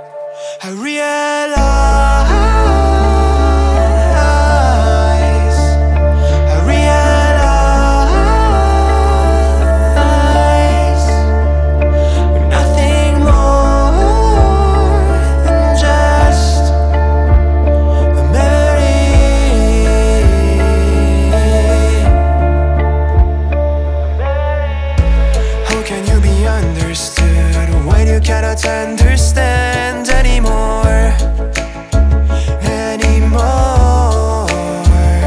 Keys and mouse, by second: 0.8 Tab, 1.8 click, 3.2 click, 3.9 click, 4.2 click, 4.5 click, 5.3 click, 6.0 click, 6.9 click, 7.2 click, 8.0-9.8 drag, 9.8 click, 10.1 click, 10.4 middle click, 10.6 middle click, 10.9 middle click, 11.1 middle click, 11.2 middle click, 11.8 middle click, 12.8 click, 15.0 ctrl+middle click, 16.4-18.8 drag, 19.5 ctrl+middle click, 19.8 shift+middle click, 20.1-21.1 middle drag, 21.3 shift+middle drag, 21.8 ctrl+middle click, 22.1 shift+middle click, 22.4 ctrl+middle click, 22.8 middle click, 23.7 Tab, 24.5 middle click, 26.2 click, 29.1-31.0 drag, 31.0 middle click, 32.0 a, 32.9-35.2 middle drag.